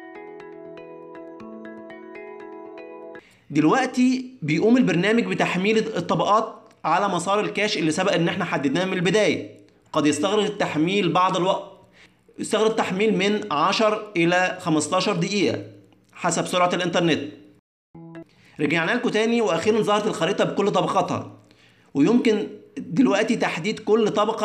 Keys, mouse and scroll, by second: 20.6 click, 21.8 click, 22.4 click, 23.0 click, 23.6 click.